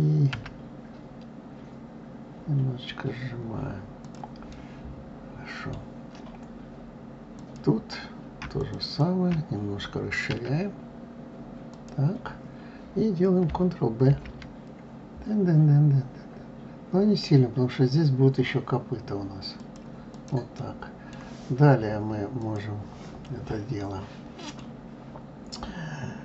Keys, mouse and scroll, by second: 4.3-7.1 middle drag, 7.1 click, 8.4 shift+click, 8.6 shift+click, 10.1 s, 13.9 ctrl+b, 19.9 click, 20.4-22.2 middle drag, 22.2 click, 23.6-26.2 middle drag.